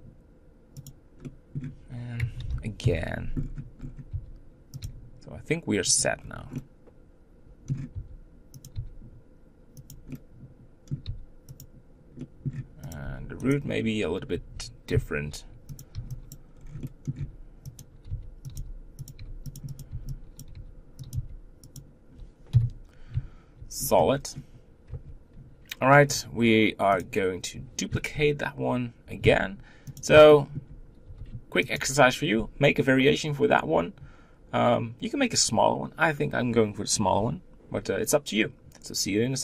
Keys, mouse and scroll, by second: 0.9 click, 1.2-2.4 middle drag, 2.4 ctrl+l, 2.8 KP_7, 3.3-3.9 scroll up 7, 4.1 r, 4.8 g, 6.2 scroll down 2, 6.5-8.0 middle drag, 8.0 r, 8.7 g, 10.1 middle click, 11.0 g, 12.3 middle click, 12.9 click, 13.0 b, 15.8 click, 16.3 b, 16.5 scroll down 3, 16.8 middle click, 17.1 scroll up 1, 17.2 g, 18.1 g, 18.5 s, 19.6 b, 19.8 click, 19.9 b, 20.5 g, 21.1 s, 22.5 KP_1, 23.6 z, 23.8-24.3 scroll down 6, 26.1 click, 27.0 click, 29.2 shift+d, 30.3 shift+middle click, 31.0 g.